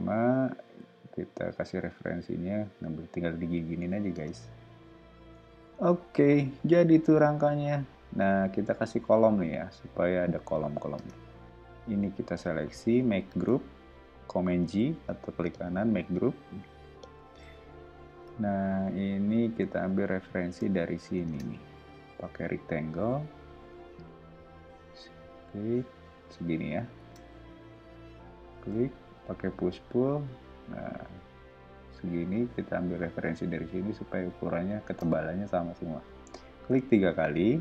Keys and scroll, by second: 4.1 space, 5.1 o, 10.9 space, 13.3 super+g, 15.0 o, 21.2 space, 21.9 r, 26.9 space, 28.7 p, 34.8 space.